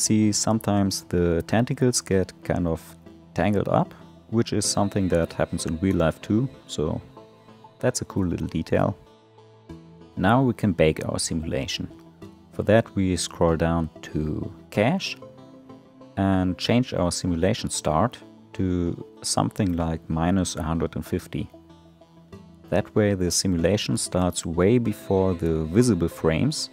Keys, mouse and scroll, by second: 3.9 space, 4.8-5.4 scroll down 3, 5.4-8.1 middle drag, 11.0 click, 12.3-15.9 scroll down 10, 15.9-21.2 drag, 21.2 BackSpace.